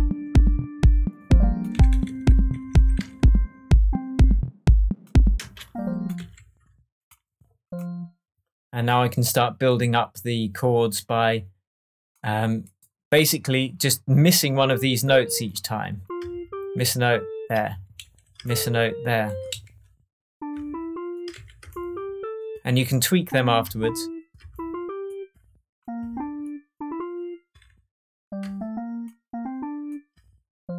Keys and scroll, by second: 1.7 Right, 2.3 Right, 5.3 space, 6.1 Left, 17.6 alt+Right, 19.4 alt+Left, 20.4 Left, 21.3 alt+Left.